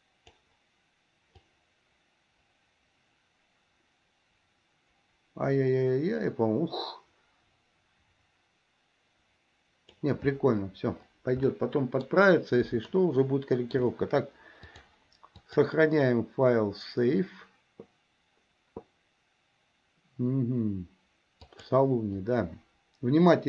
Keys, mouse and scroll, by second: 1.6-10.1 drag, 11.6-12.3 middle drag, 13.1-14.0 shift+middle drag, 14.8 click, 15.4-23.1 drag.